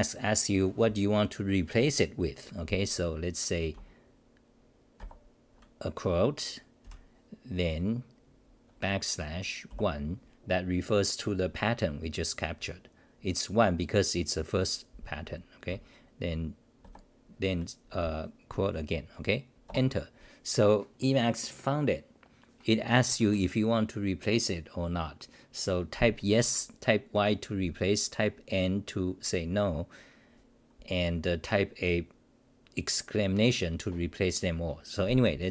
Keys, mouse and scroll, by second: 6.8 ctrl+=, 19.7 Return.